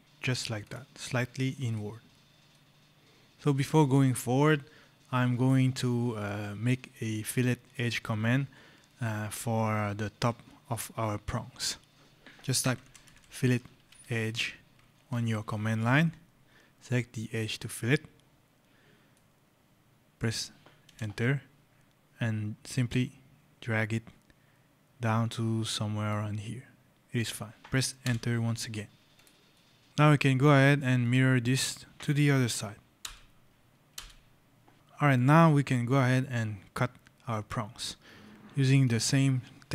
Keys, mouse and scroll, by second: 0.5 click, 0.9 right click, 2.3 right click, 3.9 shift+click, 5.7 right click, 12.2-14.7 typing, 14.9 Return, 17.5 click, 18.2 scroll, 19.0 right click, 19.3 scroll, 20.7 Return, 22.7 click, 27.9 Return, 29.0 click, 29.4 right click, 29.9 right click, 30.9 click, 32.9 Return, 33.6 x, 33.8 Return, 34.7 scroll, 38.7 click.